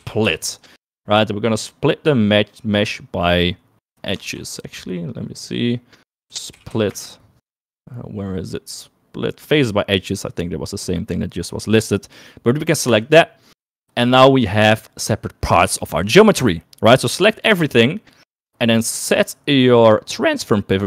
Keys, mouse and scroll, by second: 17.6 a.